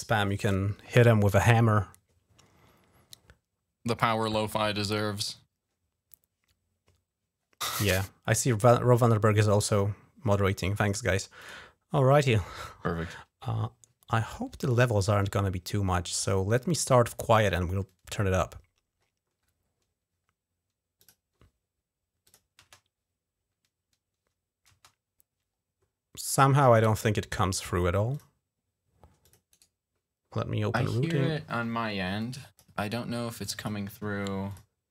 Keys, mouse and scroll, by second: 7.5 click, 11.2 click, 14.8 scroll up 2, 16.3 click, 19.2 scroll up 1, 20.8 click, 22.0 click, 22.4 space, 24.5 space, 27.9 click, 29.0 click, 29.3 right click, 31.9 click, 33.1 click, 34.3 click.